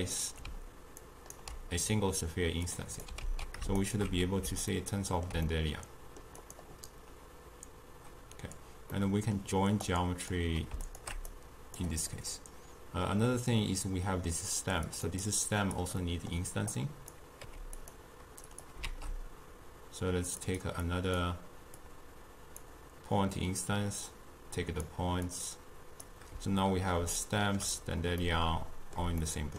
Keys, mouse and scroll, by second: 1.1 ctrl+right click, 2.7-3.3 drag, 3.3 ctrl+x, 3.9 alt+shift+click, 4.8-6.5 ctrl+middle drag, 6.5 click, 9.0-9.9 middle drag, 9.9 click, 10.9 alt+shift+click, 11.4 click, 12.1-15.0 middle drag, 15.0 click, 15.3-16.1 drag, 16.1-16.8 middle drag, 16.8 click, 17.5 g, 18.6 click, 18.9 shift+d, 20.9-25.4 drag, 27.3-29.5 shift+middle drag.